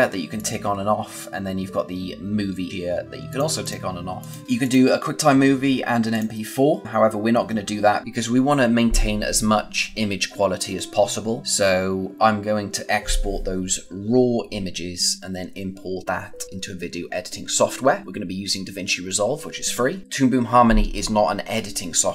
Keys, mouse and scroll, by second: 3.9 click.